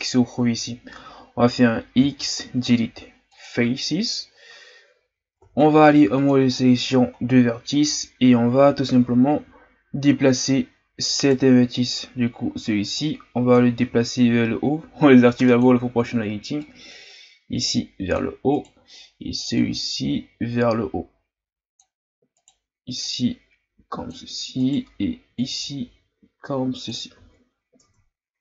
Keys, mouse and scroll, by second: 4.4-4.7 scroll down 4, 4.8-5.4 scroll up 2, 5.4 ctrl+Tab, 7.2-7.8 scroll down 2, 7.8-9.1 scroll up 2, 9.1 z, 11.2 right click, 12.9 click, 13.7 ctrl+z, 15.4 click, 16.6-18.6 drag, 18.6 right click, 19.6-22.4 drag, 22.4 right click, 23.0-24.6 drag, 24.6 right click, 25.3-27.2 drag, 27.2 z, 27.5-27.8 scroll down 1, 27.8 Tab.